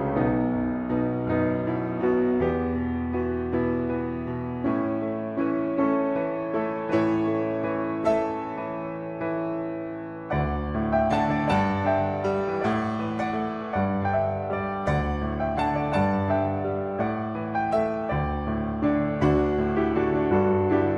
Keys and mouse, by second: 2.4 click, 6.7 shift+middle click, 8.9 click, 9.1-10.6 drag, 11.0 shift+middle click, 14.7-18.8 drag, 20.7 click.